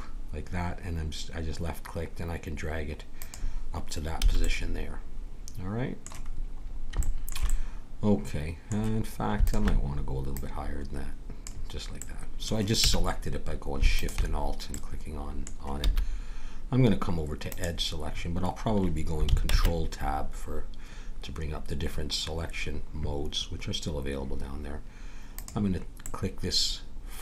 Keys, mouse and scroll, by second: 4.2 a, 4.5-5.7 middle drag, 6.3 middle click, 7.1-9.4 middle drag, 9.4-12.1 drag, 11.9 middle click, 12.8 a, 13.9-15.7 drag, 14.7-15.7 middle drag, 15.9 a, 17.6-19.3 drag, 19.5 ctrl+Tab, 25.3-27.0 drag, 26.0-27.2 middle drag.